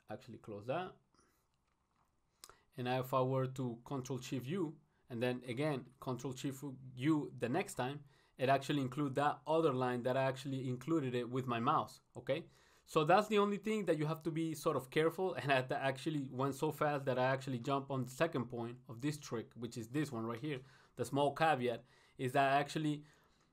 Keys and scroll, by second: 1.1 ctrl+shift+u, 10.7 ctrl+shift+u, 17.6 ctrl+shift+u.